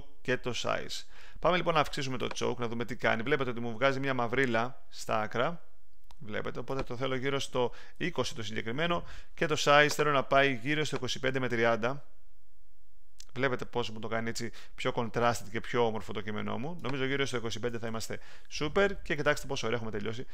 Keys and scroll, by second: 7.7-8.5 typing, 17.4-18.3 typing.